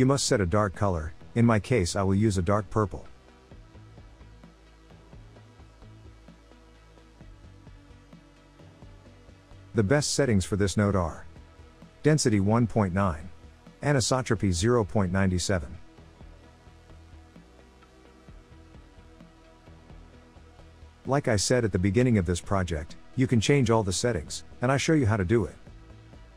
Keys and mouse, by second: 11.6-14.3 drag, 15.6-18.4 drag, 22.0 click, 23.2-24.6 drag.